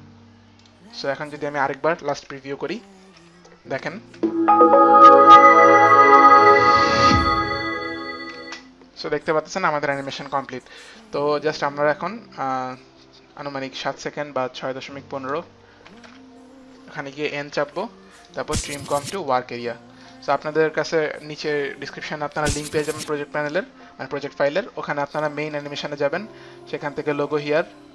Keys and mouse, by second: 0.7 click, 1.2 click, 4.0 click, 4.0 space, 8.3 space, 11.7 click, 11.7 space, 15.9 Page_Up, 17.7 Page_Up, 17.7 n, 18.3 right click, 19.2 click, 20.1 Page_Up, 20.1 click, 20.1 right click, 20.1 n, 23.4 click, 25.5 click, 27.3 click.